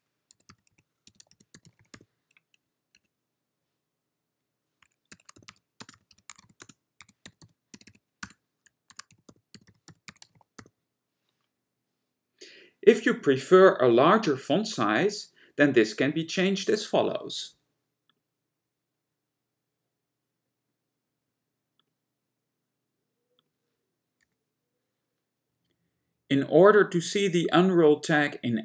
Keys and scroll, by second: 0.0-2.0 typing, 3.0 Return, 5.0-10.7 typing, 24.2 BackSpace.